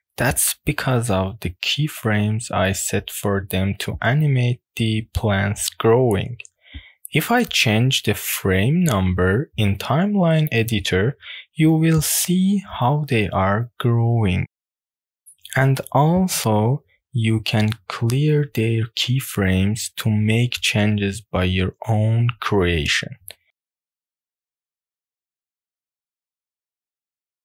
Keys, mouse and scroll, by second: 0.4 click, 1.8 click, 2.3 click, 3.0 click, 3.2 click, 3.4 click, 5.4 drag, 6.6-9.4 drag, 9.7-13.9 drag, 14.2 drag, 15.0 shift+middle click, 15.4 middle click, 17.8 click, 17.8 right click, 20.1 click, 20.1 right click, 21.6-22.0 drag, 22.4 click, 23.0 click, 23.6 click, 24.0 click, 25.4 click, 26.2-27.4 drag.